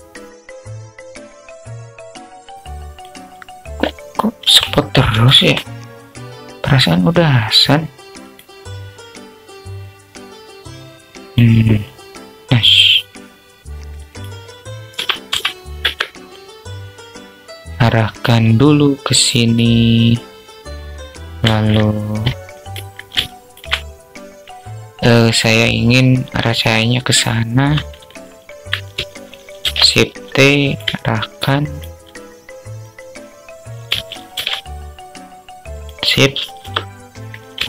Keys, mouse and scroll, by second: 0.6 click, 1.0 click, 1.5 ctrl+click, 1.7 ctrl+z, 2.0 click, 2.3 click, 9.3-10.8 drag, 11.8 click, 13.5-15.4 drag, 17.3-18.9 drag, 21.0 alt+click, 21.9 click, 22.6-23.0 alt+shift+drag, 27.6-28.0 alt+drag, 29.0 shift+f, 30.7-31.3 alt+drag, 35.9 KP_0, 37.0-37.4 alt+shift+drag.